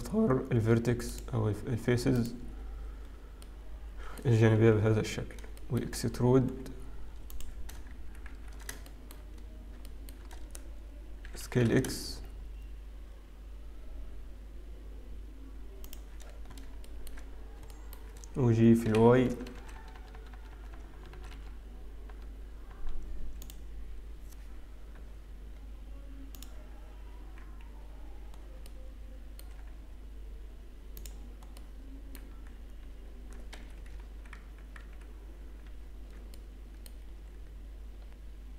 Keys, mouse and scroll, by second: 2.1 click, 2.3 alt+click, 3.1-4.4 scroll down 2, 3.5 middle click, 5.0 KP_7, 5.8 shift+middle click, 5.8-6.4 scroll down 1, 6.4-7.3 scroll down 2, 6.4 z, 9.3 shift+middle click, 9.3 shift+z, 10.5 shift+middle click, 10.5-11.4 scroll up 1, 11.4 e, 16.8 shift+middle click, 17.4-17.8 scroll up 2, 17.8 shift+middle click, 18.7 g, 24.5-26.4 scroll up 2, 26.4 click, 28.4-29.5 scroll down 3, 28.8 middle click, 30.0 z, 31.7 middle click, 35.6 ctrl+z, 35.6 x, 36.1 ctrl+z, 36.4 middle click, 37.2-38.5 scroll up 3.